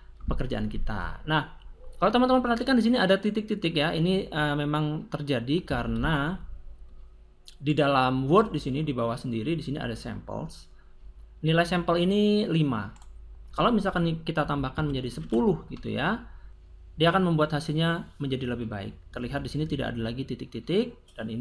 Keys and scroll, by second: 5.5 Escape, 14.3 1, 14.5 0, 15.2 Return.